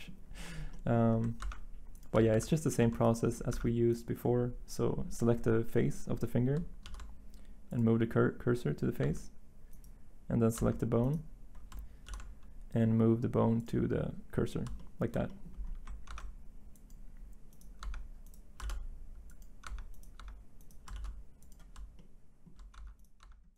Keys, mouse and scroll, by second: 1.4 ctrl+Tab, 2.3 z, 3.5 Tab, 6.8 s, 9.0 Tab, 10.5 Tab, 12.0 s, 16.1 ctrl+Tab, 17.8 Tab, 18.6 s, 19.6 Tab, 20.1 Tab, 20.9 s, 22.7 Tab.